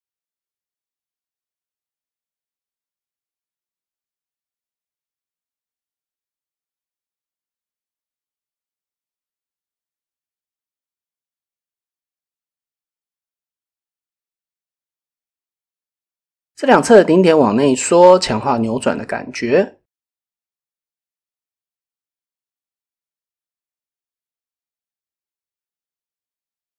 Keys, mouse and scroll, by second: 0.3-2.2 middle drag, 3.2 KP_7, 4.0 shift+click, 6.4 shift+middle click, 7.2 shift+click, 10.7 KP_7, 11.4 shift+click, 12.3-13.1 middle drag, 13.4 shift+middle click, 17.2 s, 17.2 y, 19.8 shift+middle click, 21.9 Tab, 24.3 Tab, 24.5 middle click, 26.0 KP_1.